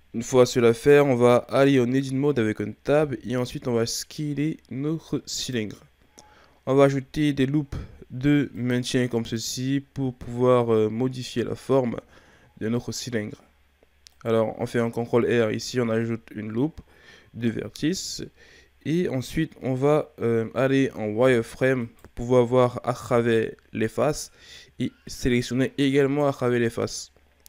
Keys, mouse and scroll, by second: 0.7-3.1 ctrl+scroll down 1, 3.1 s, 7.8 ctrl+r, 12.6-14.1 shift+scroll up 3, 14.1 right click, 18.2-21.2 shift+scroll up 3, 21.2 z, 21.8 right click, 23.0 b.